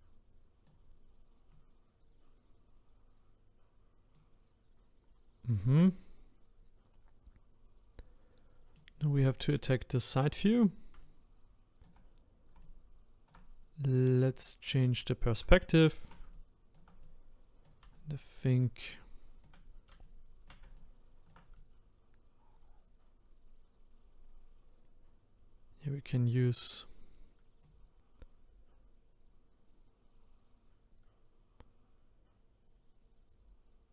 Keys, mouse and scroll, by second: 1.5-5.7 drag, 5.7-8.8 middle drag, 10.2 click, 11.0-14.4 shift+right drag, 14.4 click, 15.5-27.6 shift+right drag, 27.6-31.0 drag.